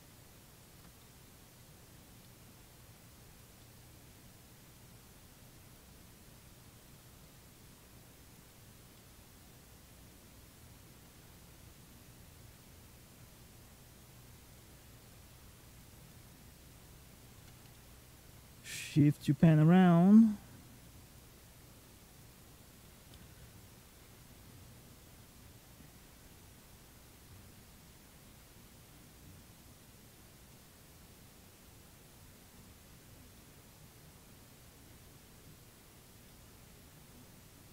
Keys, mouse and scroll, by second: 0.8 middle click, 2.1 middle click, 2.8 click, 3.4 middle click, 4.2 click, 5.9 click, 8.4-8.8 scroll down 2, 8.8 middle click, 9.8 click, 14.9 click, 15.8 click, 16.2 scroll up 2, 17.2 scroll up 2, 17.6 shift+middle click, 18.5 click, 21.2 click, 21.7 click, 22.3-23.1 scroll down 3, 22.7 middle click, 25.0 click, 30.4 click, 32.4 middle click, 33.2 shift+middle click, 33.9 click, 36.1 middle click, 37.1 click.